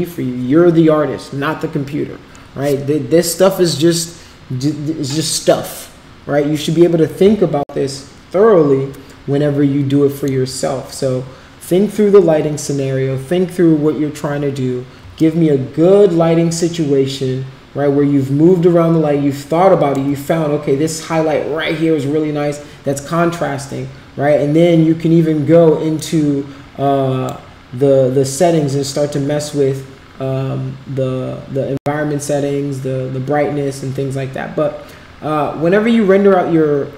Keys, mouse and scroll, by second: 8.1-10.3 alt+middle drag, 15.2-19.9 shift+right drag, 26.1-27.4 drag.